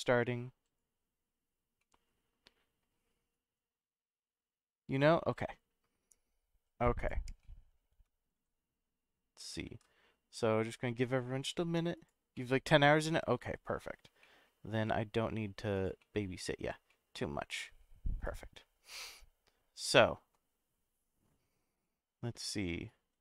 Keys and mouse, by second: 1.8-2.8 middle drag, 7.0 click, 7.4-7.8 middle drag, 8.3 shift+d, 11.9 click, 12.4-13.9 middle drag, 14.2 middle drag, 14.7 s, 15.7 click, 16.0 middle click, 16.9 middle click, 18.2 click, 19.0-19.9 middle drag, 21.8 middle click.